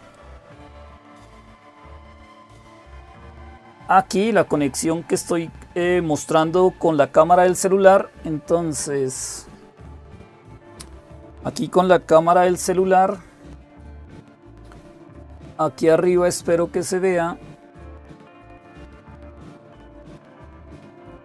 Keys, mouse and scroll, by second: 0.0 click, 1.6 click.